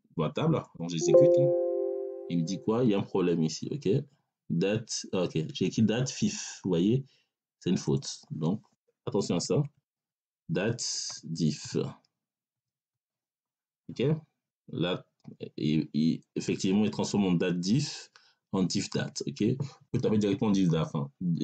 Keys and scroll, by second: 9.2 BackSpace, 11.0 d, 11.5 i, 12.4 f.